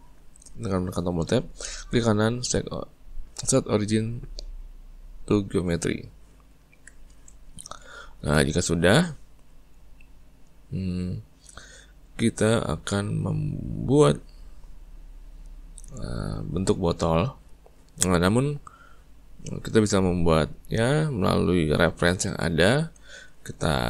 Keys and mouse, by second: 1.5-4.7 right drag, 6.4-22.1 ctrl+middle drag.